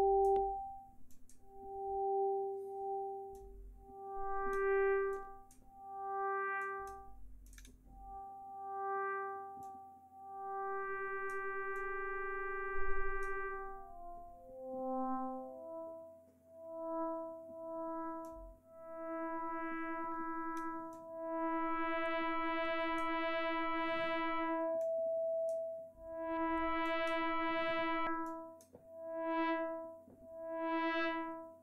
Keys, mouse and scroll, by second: 1.0 click, 3.3-4.7 drag, 5.1 click, 6.5 click, 7.4 click, 9.6-11.4 drag, 11.7-13.4 drag, 18.2-20.7 drag, 20.9-23.1 drag, 24.7 click, 26.8 click, 28.2 click.